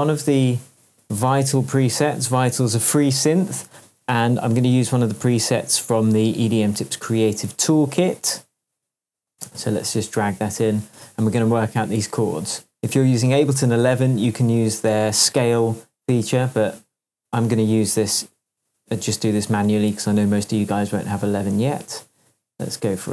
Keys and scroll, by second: 0.0-0.3 typing.